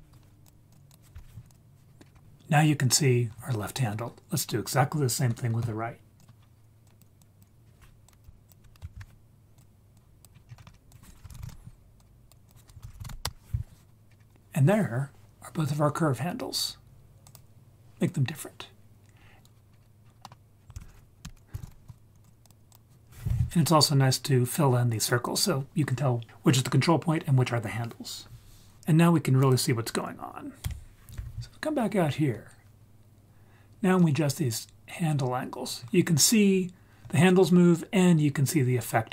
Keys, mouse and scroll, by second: 0.7 click, 0.9-1.5 drag, 2.0-4.7 scroll up 2, 4.7 scroll up 1, 6.2-6.8 scroll down 3, 6.8 click, 7.2 click, 8.0 click, 8.5 shift+click, 8.9 ctrl+shift+d, 9.5 drag, 9.9 drag, 10.3 scroll down 2, 10.5-11.0 scroll up 7, 10.9 click, 12.0 drag, 12.5 shift+click, 14.0-15.3 scroll up 4, 17.3 click, 19.2-20.0 scroll down 6, 19.7 scroll up 2, 20.0 scroll down 1, 20.2 middle click, 20.2 scroll down 1, 20.7 shift+a, 21.6 l, 22.7 click, 29.4 drag, 30.6 Tab, 31.7 scroll up 2, 32.4-33.6 scroll up 1, 34.0-35.7 drag.